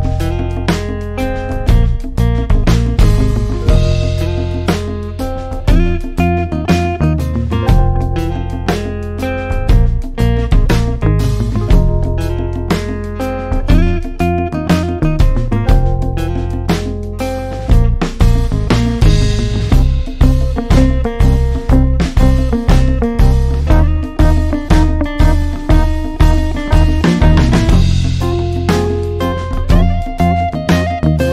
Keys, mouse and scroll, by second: 26.2-28.9 alt+scroll down 1, 30.9 click.